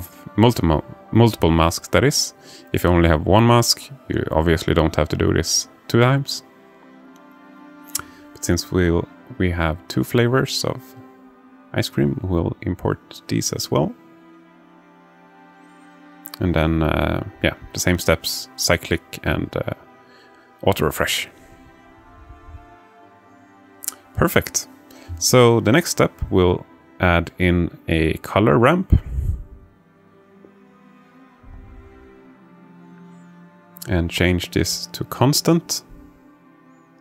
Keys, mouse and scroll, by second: 0.1 click, 1.4 click, 1.9 shift+a, 6.7 click, 25.4 click, 25.9 click, 27.0-28.4 alt+shift+middle drag, 31.6 click, 32.1 shift+a.